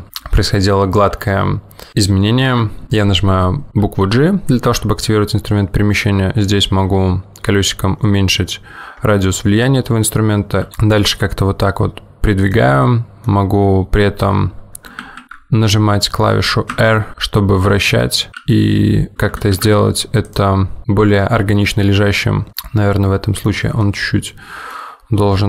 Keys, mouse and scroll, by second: 4.8 g, 13.0 middle click, 15.0 ctrl+z, 16.9 r, 18.4 g, 22.5 middle click, 22.5 scroll up 1, 24.0 middle click.